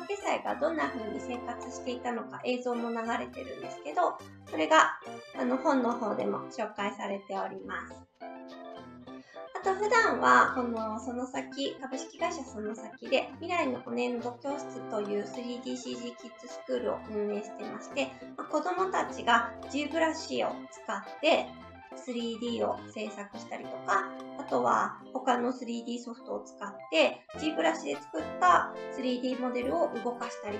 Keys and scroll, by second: 8.9 Right.